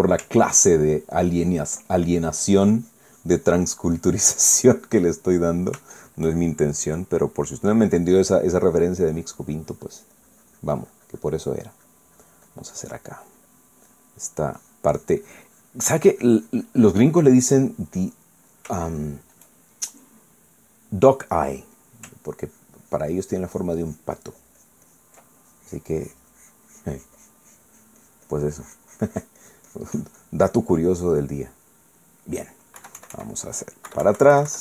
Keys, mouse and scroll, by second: 1.8 ctrl+click, 3.2-6.8 ctrl+drag, 6.8 shift+middle click, 7.7 shift+middle click, 8.6 middle click, 10.0-13.9 drag, 14.3 click, 15.7-18.1 drag, 18.2 middle click, 18.8 scroll up 1, 18.9 middle click, 19.7 shift+scroll up 1, 19.8 shift+middle click, 20.9 middle click, 22.5 middle click, 23.4 ctrl+click, 24.5-26.2 ctrl+drag, 26.4-31.5 ctrl+drag, 31.6 middle click, 32.4 middle click, 33.8 KP_1.